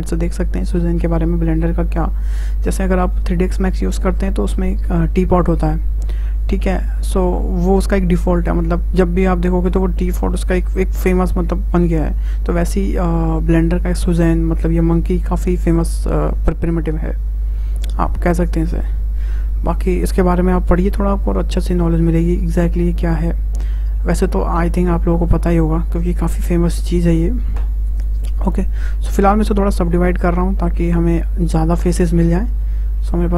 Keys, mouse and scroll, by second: 29.3 click, 30.8 click, 31.4-32.1 drag, 32.1-32.5 scroll up 2, 32.5 Tab, 32.8 scroll down 2, 33.0-33.3 middle drag.